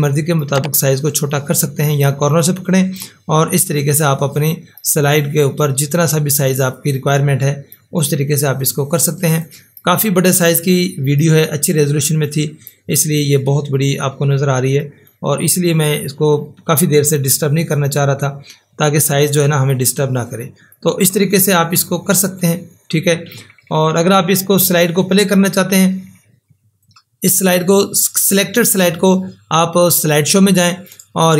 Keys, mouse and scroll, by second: 30.0 click.